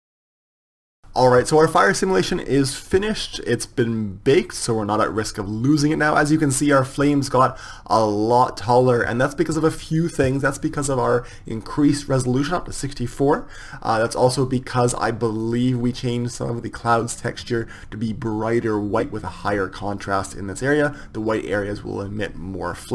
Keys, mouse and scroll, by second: 0.9 click, 0.9 KP_0, 4.9-11.2 drag, 15.8-22.6 drag.